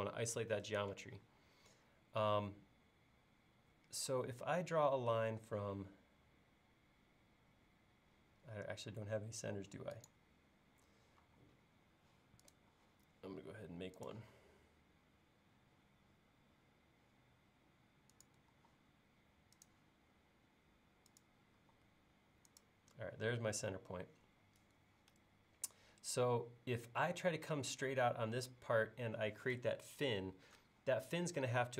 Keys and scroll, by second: 4.1 l, 18.6 l, 21.6 l.